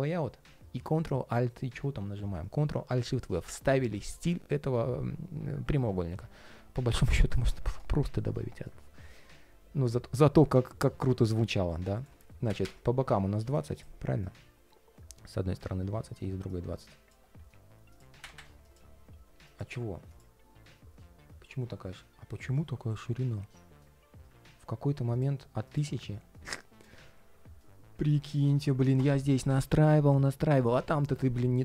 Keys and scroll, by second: 2.3 alt+super+v.